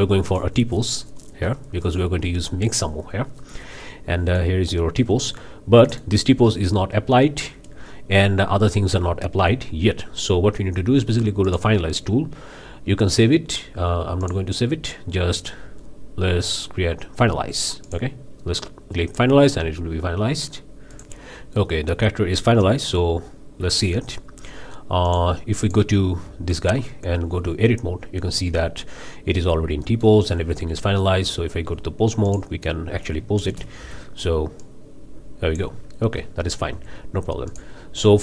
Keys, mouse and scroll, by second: 0.3 click, 1.8 click, 3.4-4.6 middle drag, 5.0 z, 5.8-6.2 middle drag, 11.4-11.8 drag, 14.2 click, 17.8 click, 20.9 click, 21.6-22.1 middle drag, 22.9 z, 23.9-24.3 middle drag, 25.1 click, 25.6 click, 26.2 Tab, 28.3 a, 29.8 middle click, 30.4 Tab, 31.2 Tab, 32.3 drag, 33.4 shift+space, 33.8 shift+r, 34.6-35.8 drag, 36.3 ctrl+z, 37.5-37.8 drag.